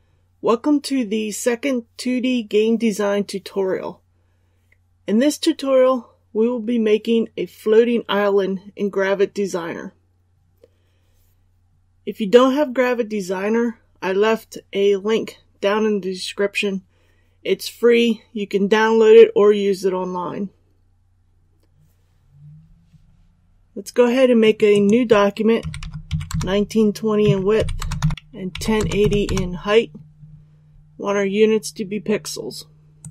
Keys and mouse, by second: 25.6 KP_1, 25.7 KP_9, 26.0 KP_2, 26.2 KP_0, 27.2 Tab, 27.5-28.7 typing, 32.9-33.1 drag.